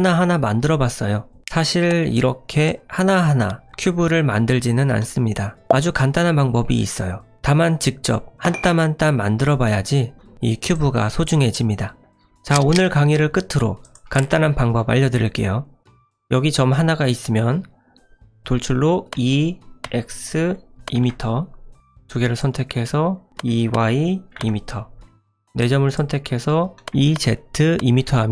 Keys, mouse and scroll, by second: 2.1 click, 10.7 click, 13.8 click, 15.8 ctrl+z, 19.1 e, 22.0 click, 23.3 e, 25.9 click, 26.9 ctrl+z, 26.9 e.